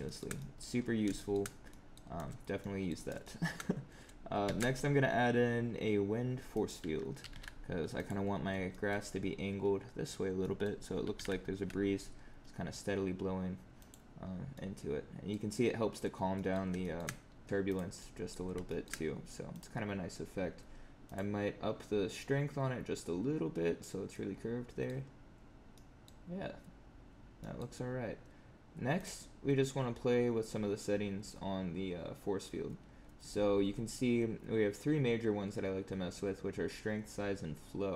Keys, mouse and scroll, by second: 0.0 shift+middle click, 0.3 middle click, 0.7 scroll up 6, 1.1 shift+middle click, 1.4 scroll down 3, 1.6 middle click, 2.5 middle click, 3.1 shift+middle click, 4.4 shift+a, 7.1 g, 8.6 middle click, 10.3 middle click, 11.0 r, 14.2 scroll up 3, 14.4 middle click, 16.3 middle click, 16.7 shift+middle click, 17.1 scroll down 2, 17.4 click, 17.6 click, 17.9 middle click, 18.6 shift+middle click, 19.4 click, 21.0 click, 22.1 click, 24.0 middle click, 25.0 scroll up 4, 25.7 middle click, 26.3 scroll up 1, 26.9 scroll down 2, 27.3 middle click, 27.7 scroll down 4, 28.9 click.